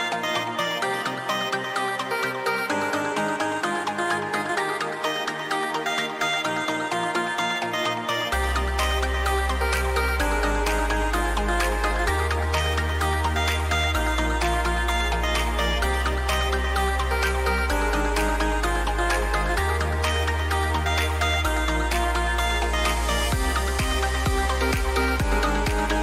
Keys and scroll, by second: 8.7 ctrl+-, 15.5 ctrl+shift+a, 16.5 ctrl+shift+a, 22.2 ctrl+alt+shift+e, 24.4 ctrl+shift+a.